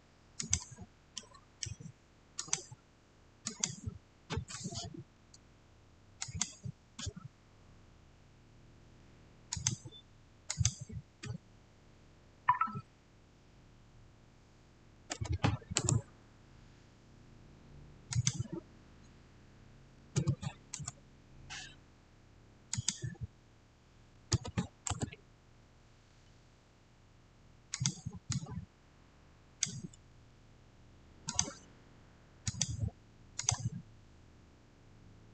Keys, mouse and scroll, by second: 1.1-2.3 middle drag, 2.3 click, 6.1 click, 6.1 click, 9.4 click, 9.4 click, 14.7-15.5 typing, 14.9 click, 15.6 Return, 18.0 click, 19.6-20.5 typing, 20.6 Return, 22.6 click, 23.8-24.7 typing, 24.7 Return, 27.6 Return, 27.6-31.7 drag.